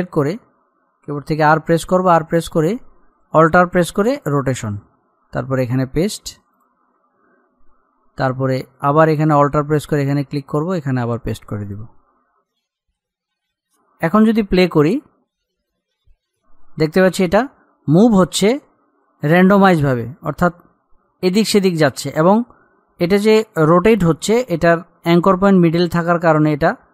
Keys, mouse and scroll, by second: 1.6 r, 4.4 alt+click, 5.7 right click, 6.8 click, 10.0 alt+click, 10.9 right click, 11.8-16.4 drag.